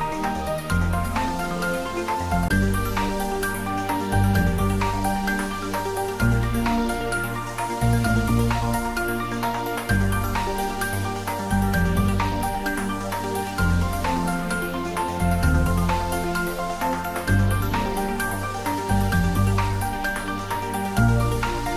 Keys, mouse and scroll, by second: 0.4-1.5 typing, 6.0 click, 6.7-8.4 middle drag, 8.4 ctrl+t, 10.1 click, 11.2 scroll up 1, 11.5-13.1 middle drag, 13.1-13.5 scroll down 1, 13.5 middle click, 14.0-14.5 scroll up 1, 14.5 click, 16.4 3, 16.6 click, 20.6 z.